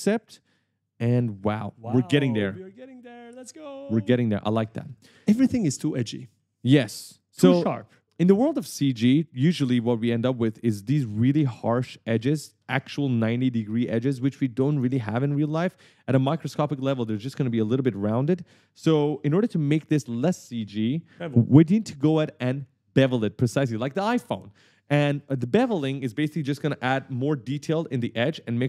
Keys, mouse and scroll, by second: 0.6 click, 1.3 right click, 2.8 e, 5.3 d, 5.8 d, 6.4 w, 6.8 a, 9.4 right click, 9.4-11.0 typing, 11.6 scroll down 1, 15.4 right click, 15.5 d, 15.8 a, 19.1 right click, 19.2 s, 19.6 s.